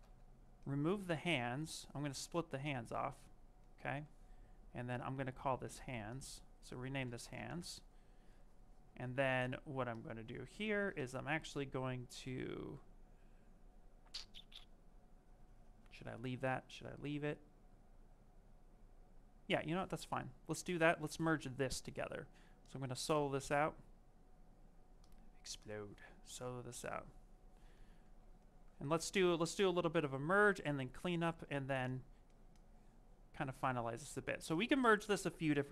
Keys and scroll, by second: 6.7-7.6 typing, 13.2 space, 29.7 s.